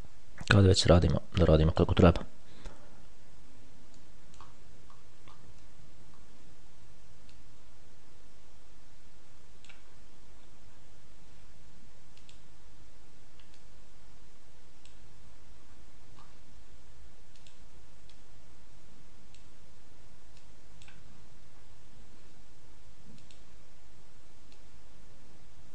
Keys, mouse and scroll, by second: 1.7 click, 2.9-3.5 ctrl+scroll up 2, 3.7-4.2 ctrl+scroll up 1, 4.3 middle click, 5.1-6.1 ctrl+scroll up 2, 6.1-6.9 ctrl+scroll up 2, 7.6-10.1 drag, 10.1-10.7 scroll down 2, 10.7-11.5 scroll down 1, 11.5 scroll down 1, 12.5 click, 13.9-15.5 drag, 15.5-16.4 scroll down 1, 16.4-16.9 scroll down 1, 17.7 click, 18.4-20.1 drag, 20.7 click, 21.3-22.4 scroll down 1, 23.5 click, 24.8-25.7 drag.